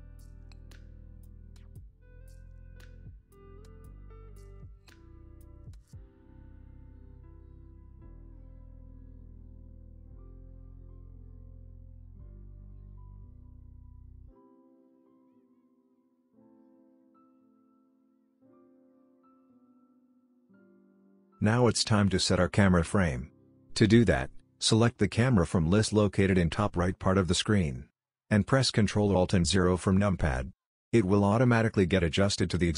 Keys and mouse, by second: 3.6-4.6 drag, 26.7 ctrl+alt+KP_0, 29.5 n, 30.6 click, 32.6 click.